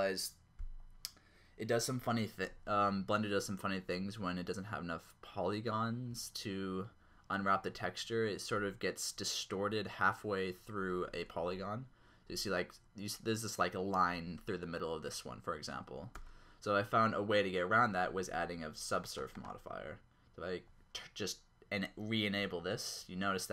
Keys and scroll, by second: 11.4 Tab, 16.2 Tab.